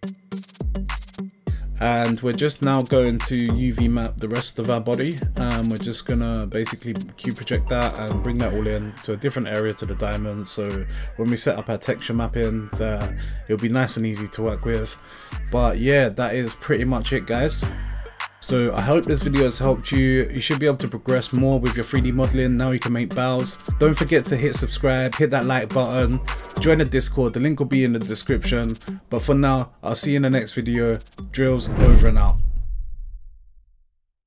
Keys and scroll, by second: 1.0 Caps_Lock, 1.6 a, 2.5 u, 6.0 s, 7.1 g, 10.1 Tab, 12.6 Tab.